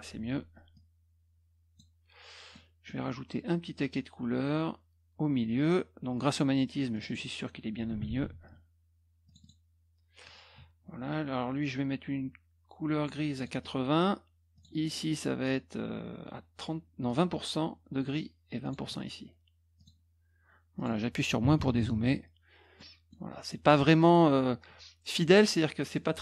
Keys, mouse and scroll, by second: 0.7-1.7 drag, 2.5 middle click, 6.9 click, 7.0 click, 8.0 ctrl+z, 9.2 click, 9.4 click, 13.3 click, 14.5 click, 17.0 click, 18.6 click, 19.7 click, 20.7 click, 22.7 middle click, 23.5 middle click, 25.1 middle click.